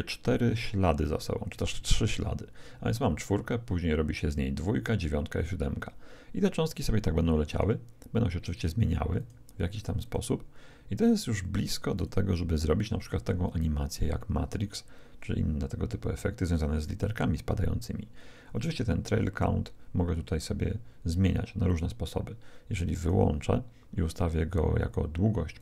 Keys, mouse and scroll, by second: 7.5-13.7 drag, 21.6-24.7 drag, 25.5-25.6 drag.